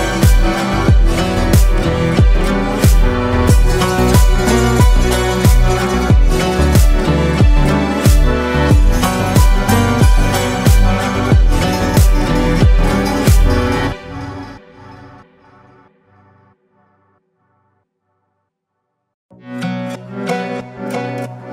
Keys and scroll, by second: 17.5 Delete, 18.9 ctrl+z.